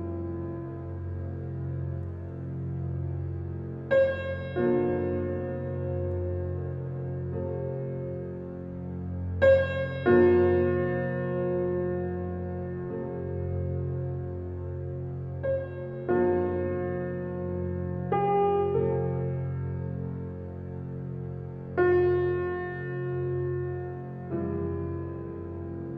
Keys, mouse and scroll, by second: 0.7 space, 0.9 click, 1.3 space, 1.5-3.8 alt+right drag, 3.8 alt+click, 4.3-6.2 drag, 6.2 alt+right click, 7.2-9.5 alt+drag, 9.5 alt+right click, 10.4 alt+click, 11.6 alt+right click, 12.4 alt+click, 13.1-16.4 drag, 17.6-20.0 drag, 20.5 click, 24.5-25.4 ctrl+alt+scroll down 1.